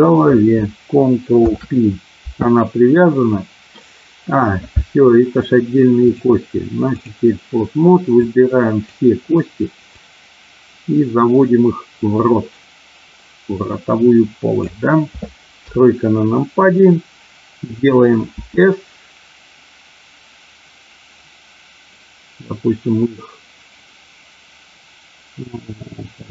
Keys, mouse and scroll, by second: 1.3 ctrl+p, 6.0-7.0 drag, 8.2 click, 9.9-14.6 drag, 15.5 KP_3, 18.6 s.